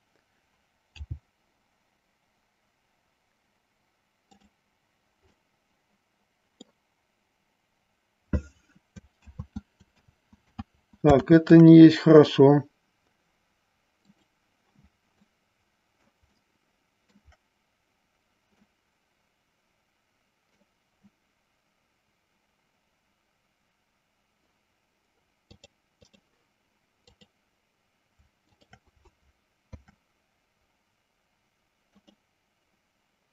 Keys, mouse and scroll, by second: 1.2 g, 5.5-6.9 middle drag, 9.7 ctrl+z, 10.5 ctrl+z, 11.8 ctrl+z, 14.2 click, 15.4 middle click, 16.5 shift+middle click, 18.8-20.8 middle drag, 25.6 click, 28.6 shift+click, 29.8 ctrl+p.